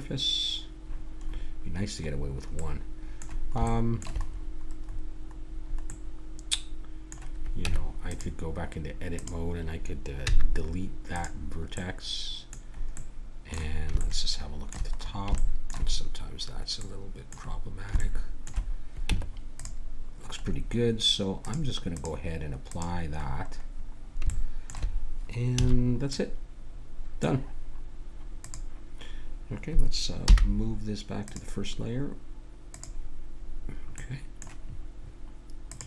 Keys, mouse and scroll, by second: 1.2-6.4 middle drag, 7.6 Tab, 9.1-11.1 drag, 10.3 x, 19.1 Tab, 21.4-24.3 drag, 24.3 middle click, 25.5 a, 28.4-30.2 drag, 30.2 m, 32.6 click, 34.0-35.6 middle drag, 35.6-35.8 drag.